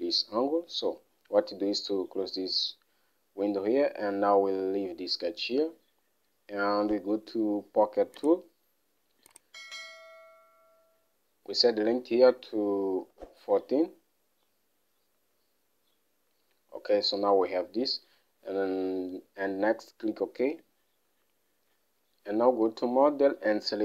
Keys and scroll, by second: 13.2-14.1 typing.